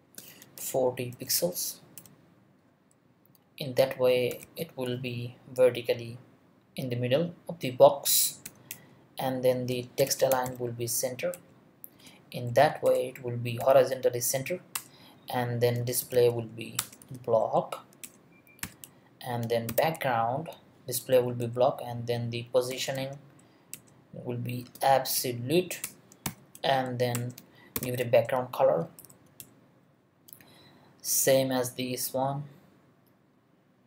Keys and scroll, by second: 0.6 0, 1.1 BackSpace, 1.2 4, 2.0 0, 4.1-4.9 typing, 8.4 ;, 8.7 Return, 9.7-11.9 typing, 11.3 Return, 12.5 Down, 12.8 Return, 13.6 ;, 14.7 Return, 15.7 Return, 15.8-17.0 typing, 16.8 Return, 17.4 Down, 18.0 Return, 18.6-21.0 typing, 18.8 Return, 22.5-23.5 typing, 23.7 Return, 24.6 space, 25.1 Down, 25.8 Return, 26.2 ;, 27.1 Return, 27.5-28.3 typing, 29.0 Down, 29.4 Return.